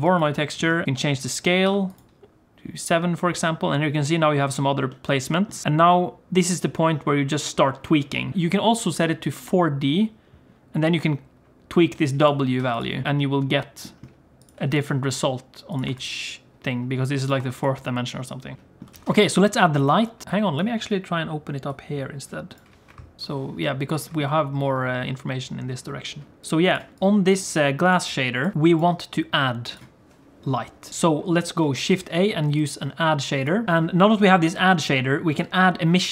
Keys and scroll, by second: 19.0 alt+a, 19.2 ctrl+s, 22.9 shift+F3, 23.2 shift+F3, 24.2 n, 24.7 m, 28.5 g, 31.7 shift+a, 35.9 shift+a.